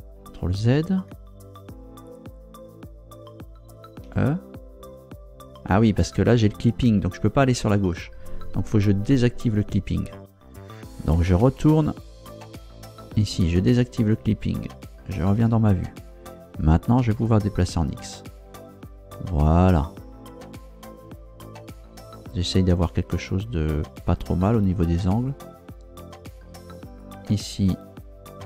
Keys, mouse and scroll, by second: 0.6 ctrl+z, 4.0 e, 9.0 Escape, 11.7 ctrl+Down, 13.1 click, 15.3 ctrl+Down, 17.1 g, 17.7 x, 24.0 click, 27.0 right click.